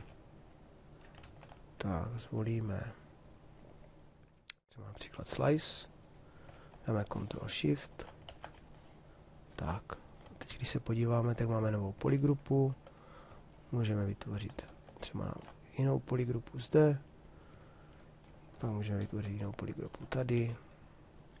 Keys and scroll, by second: 1.3 ctrl+z, 7.9 ctrl+z, 10.5 shift+f.